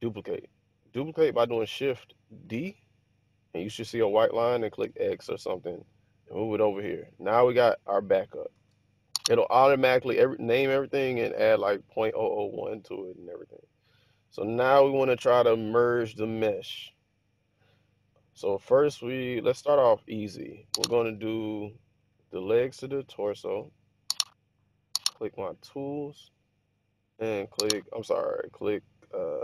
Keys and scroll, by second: 2.5 d, 4.9 x.